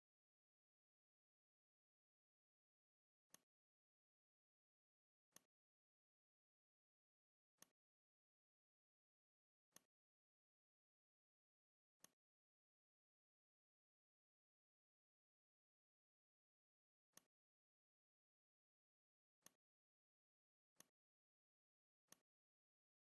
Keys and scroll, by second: 14.1 shift+m.